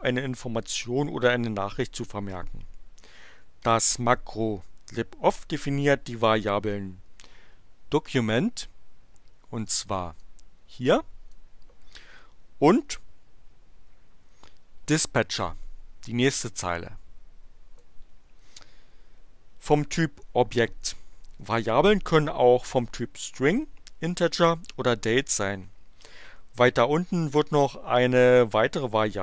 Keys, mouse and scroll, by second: 9.6 click, 10.2-11.5 drag, 16.3-17.9 drag.